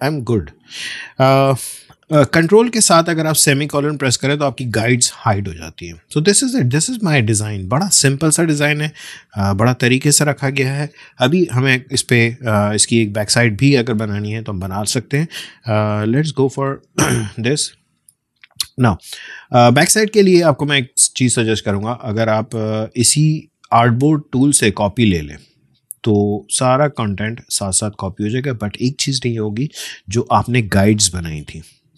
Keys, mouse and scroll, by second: 3.3 ctrl+space, 3.6 ctrl+;, 6.3 ctrl+alt+;, 6.4-7.0 alt+scroll down 1, 15.7 alt+scroll down 1, 16.0 ctrl+;, 16.8 space, 17.1 click, 17.3 space, 23.7-27.6 drag, 27.6 space, 27.8 click, 28.1 space, 29.0 ctrl+z, 30.6-31.9 alt+drag.